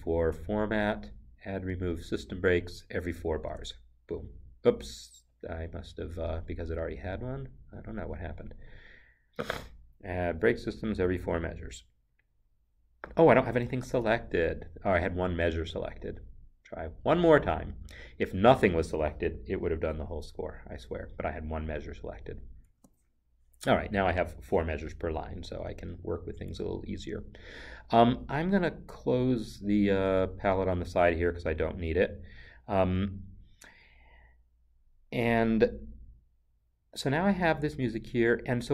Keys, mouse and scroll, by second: 0.0 click, 1.7 click, 6.3 Return, 8.8 click, 11.4 click, 22.8 Return, 31.9-34.3 scroll, 35.2-37.1 scroll.